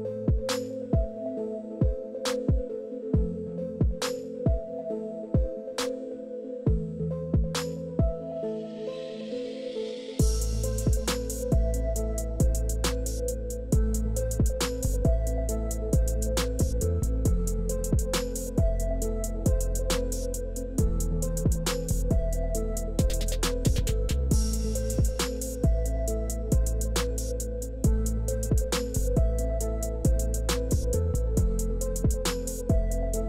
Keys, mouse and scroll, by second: 4.0-9.2 shift+drag, 10.6 shift+click, 11.4 KP_4, 11.5 KP_5, 11.8 KP_0, 12.0 Return, 14.5 click, 15.2 KP_5, 15.3 KP_0, 15.9 Return, 17.8-21.5 drag, 21.6-22.0 scroll down 2, 22.5 click, 22.9 scroll down 1, 23.2 middle click, 24.7 click, 26.0 click, 27.2 click, 28.0 KP_0, 28.3 KP_3, 28.5 Return, 29.8 middle click, 30.3 middle click, 31.3-31.7 middle drag, 32.0 middle click, 32.8 scroll up 1, 33.1-33.2 middle drag.